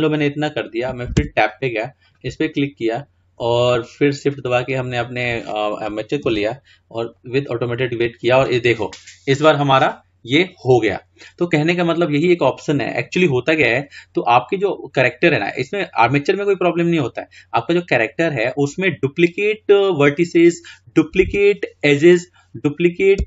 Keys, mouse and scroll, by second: 1.4 Tab, 2.1-2.5 drag, 3.7 shift+click, 6.4 ctrl+p, 21.4 Tab.